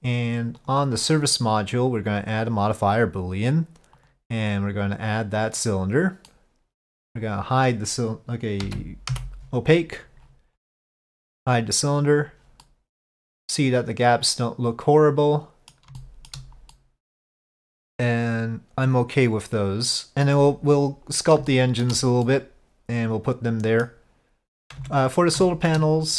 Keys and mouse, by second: 0.7-3.2 drag, 4.1-5.6 drag, 6.4-6.9 middle drag, 12.2 click, 12.7-15.8 middle drag, 16.0-16.4 shift+middle drag, 16.8-20.3 middle drag, 21.6-21.9 shift+middle drag, 22.3-23.9 middle drag, 24.9 Tab, 25.5 shift+middle click.